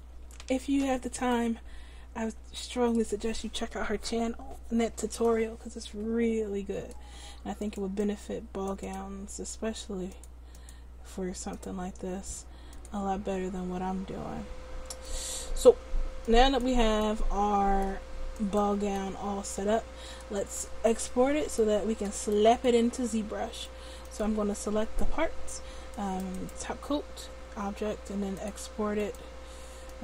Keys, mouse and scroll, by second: 0.6 ctrl+z, 7.7-9.8 drag, 8.9-10.5 right drag, 10.2 click, 16.3-17.4 drag, 24.2-30.0 drag.